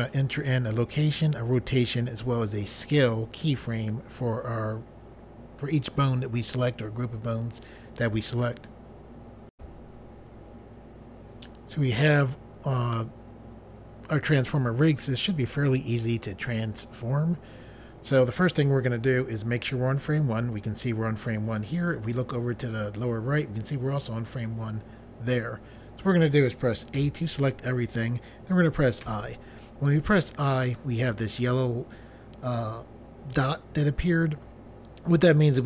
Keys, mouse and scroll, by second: 9.5 Pause, 26.9 a, 29.0 i.